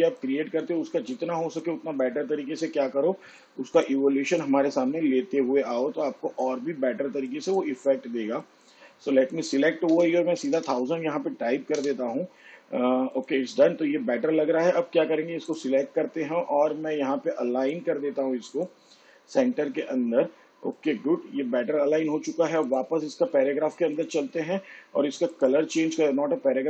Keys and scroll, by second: 10.8 1, 11.4 0, 12.7 0.